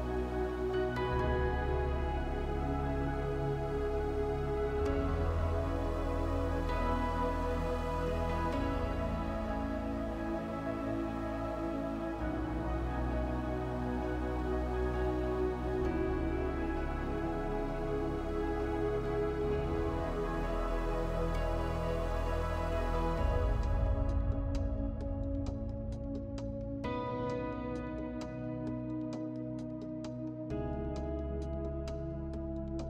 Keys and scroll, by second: 3.8 7, 4.2 5, 7.8 space.